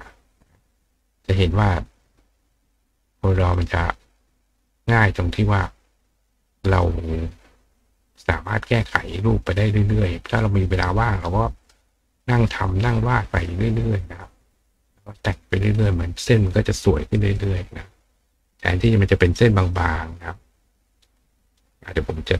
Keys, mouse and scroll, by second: 0.4 click, 2.1-3.1 drag, 3.4 click, 4.1 click, 5.4-6.4 drag, 6.7 click, 8.4 click, 9.4-10.9 drag, 11.7 click, 13.2-13.9 drag, 14.4 click, 15.2 click, 15.7 click, 17.3 click, 18.1 click, 19.7-21.2 drag, 21.4 click.